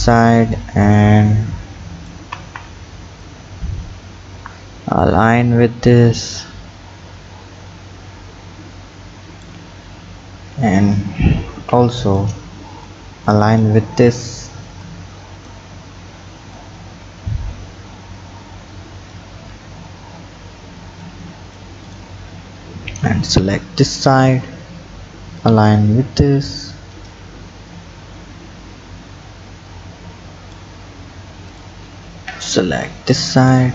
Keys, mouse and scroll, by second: 0.9 click, 2.4 ctrl+z, 3.3-6.2 drag, 9.8-10.7 scroll down 6, 10.7 click, 11.5 b, 12.9 click, 13.8-14.8 scroll up 4, 14.8 click, 15.8-16.6 scroll up 4, 16.6-19.4 drag, 19.4-21.0 scroll down 6, 21.0 click, 22.9 b, 24.4-25.4 scroll up 3, 25.4-28.4 drag, 30.9-31.5 scroll down 4, 31.5 click, 32.4 b.